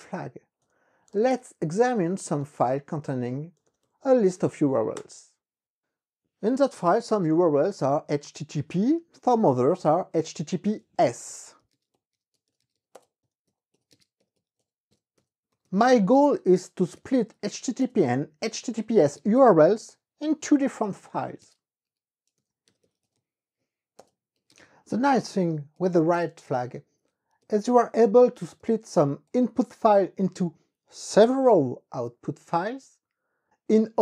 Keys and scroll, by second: 0.9-4.7 typing, 2.8 KP_Subtract, 5.1 KP_Enter, 11.1-29.7 typing, 24.1 Return, 26.2 Return, 29.7 Return, 30.5 Up, 31.0 s, 31.3 Return.